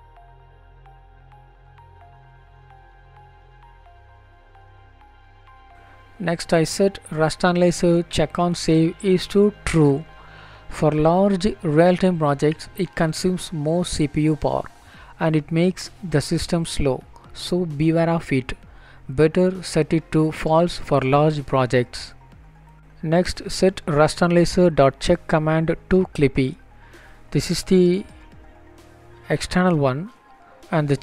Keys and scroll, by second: 17.5 BackSpace, 30.0 Down, 30.8 Return.